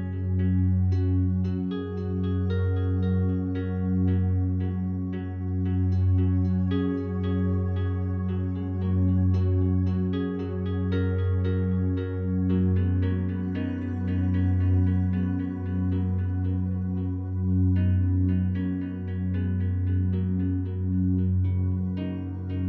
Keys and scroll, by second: 5.0 shift+Page_Down, 9.5 shift+Page_Down, 13.6 ctrl+g.